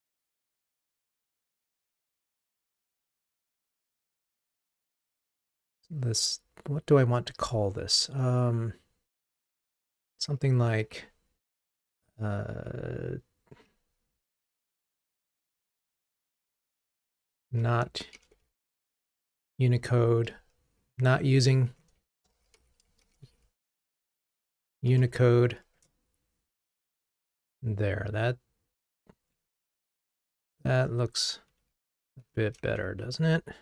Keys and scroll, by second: 31.0 alt+Up, 32.8 alt+super+l.